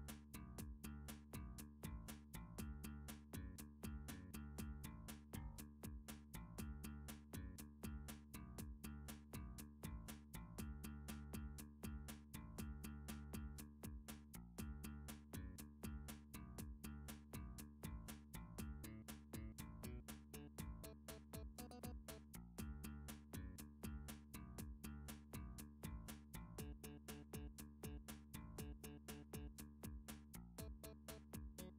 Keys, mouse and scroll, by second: 1.0 alt+click, 1.8 a, 2.8 7, 4.3 g, 5.1 x, 6.3 click, 7.0 s, 8.3 x, 10.2 click, 10.5 3, 11.0 Tab, 13.0 click, 13.5 Tab, 14.4 alt+z, 16.1 alt+z, 17.5 alt+z, 19.6 middle click, 20.0 3, 21.8 alt+z, 22.2 alt+z, 22.9 click, 23.9-26.1 drag, 27.8 middle click, 28.1 3, 28.7-29.2 scroll, 29.7 shift+middle click.